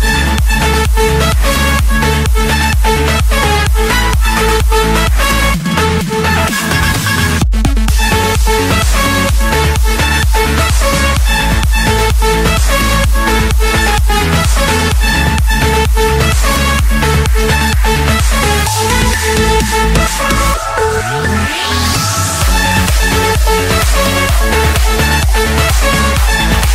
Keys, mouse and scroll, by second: 1.3-1.8 scroll up 1, 3.6 click, 5.5 click, 6.8 click, 7.6 click, 7.9-9.3 scroll down 14, 9.3 scroll, 10.3 click, 11.3 click, 12.7 click, 14.3 click, 15.1 click, 15.5-16.3 scroll, 18.9 click, 19.4-19.8 scroll, 20.0-20.5 scroll, 21.1 click, 22.2-22.7 scroll, 22.7 Escape, 23.9-24.9 typing, 25.9 Return.